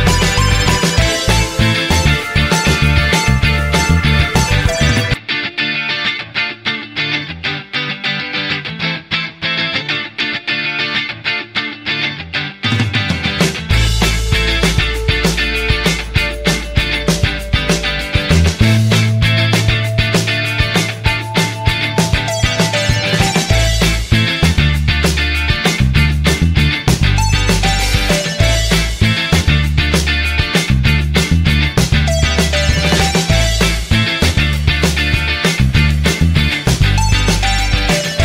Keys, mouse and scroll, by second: 4.1 typing, 18.2 1, 19.5-20.2 typing, 21.7 typing, 24.9 typing.